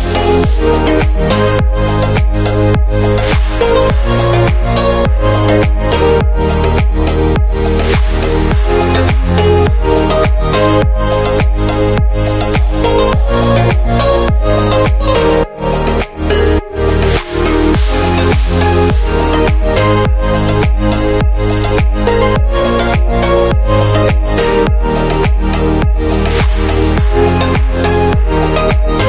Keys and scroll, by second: 17.1 super+z.